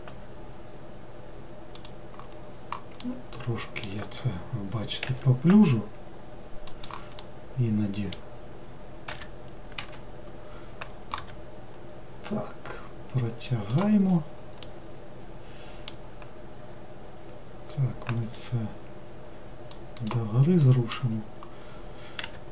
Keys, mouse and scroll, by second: 2.5-3.0 scroll down 1, 3.0-5.1 middle drag, 5.1 e, 7.3-9.2 middle drag, 9.2 e, 11.3 g, 14.1 scroll down 1, 14.7-17.8 middle drag, 18.3 g, 20.7 middle click, 21.1-22.3 scroll down 1, 22.3 e.